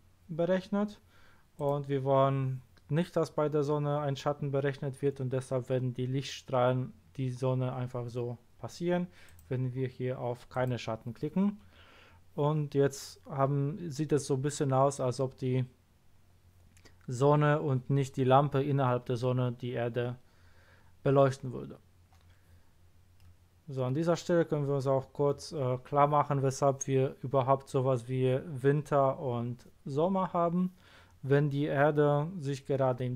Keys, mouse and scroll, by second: 1.5 click, 9.2 click, 10.5 click, 23.1-23.4 middle drag.